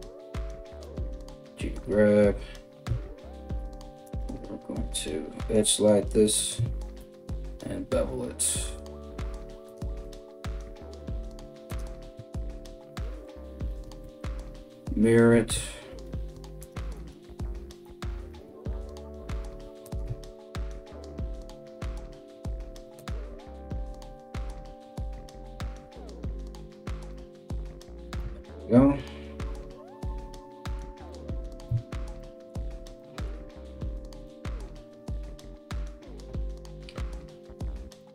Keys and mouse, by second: 3.7 alt+right click, 4.4 g, 6.6 ctrl+b, 9.6 g, 11.9 KP_1, 13.6 alt+x, 15.5 ctrl+r, 16.5 alt+right click, 17.9 g, 20.0 ctrl+b, 23.7 alt+x, 27.8 Tab, 31.3 Tab.